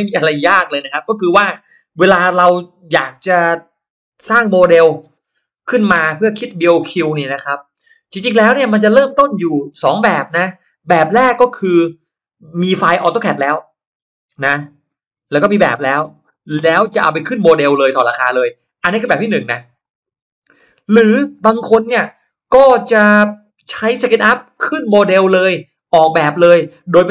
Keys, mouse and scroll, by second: 0.4 shift+right click, 0.6 shift+right click, 1.5 shift+click, 1.9 shift+right click, 11.5 shift+x, 12.7-15.1 shift+drag, 13.7 shift+x, 15.3 shift+click, 16.3 shift+x, 17.1-18.3 shift+drag, 18.1 shift+x, 18.8 shift+click, 19.4 shift+click, 19.9-20.9 shift+drag, 20.9 shift+x.